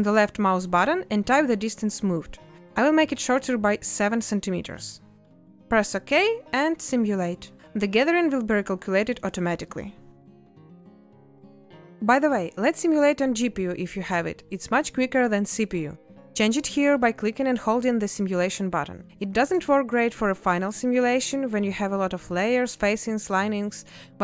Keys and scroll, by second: 4.7 space, 19.9 space.